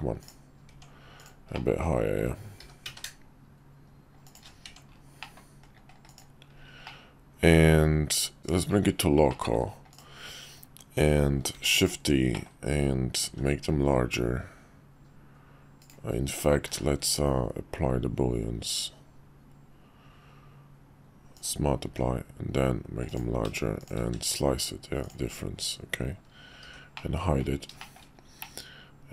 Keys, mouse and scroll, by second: 0.2 click, 0.7 Tab, 1.2 click, 1.5 middle click, 2.6 g, 4.6 Tab, 5.2 middle click, 6.0 click, 6.8-8.4 middle drag, 8.4 /, 9.3-9.6 middle drag, 9.9 click, 11.5 shift+d, 12.3 middle click, 13.2 s, 16.7 q, 21.8 s, 23.8 shift+click, 24.0 q, 26.6 h, 26.9 middle click, 27.8 shift+middle click, 28.4-29.1 middle drag.